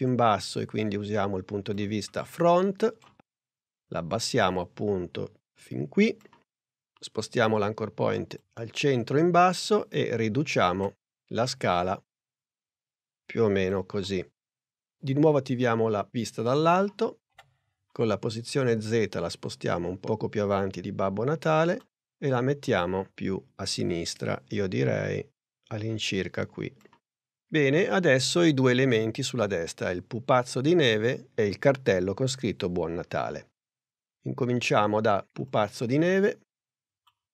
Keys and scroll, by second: 10.7 s, 17.3 p.